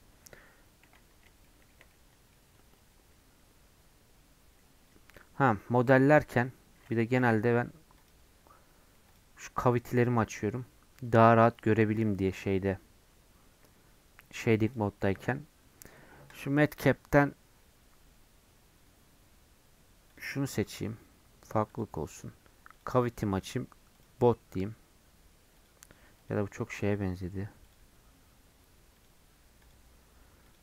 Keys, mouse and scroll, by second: 2.5 scroll up 1, 8.1 ctrl+a, 11.6-20.2 drag, 22.7-24.7 drag, 27.7-30.6 drag.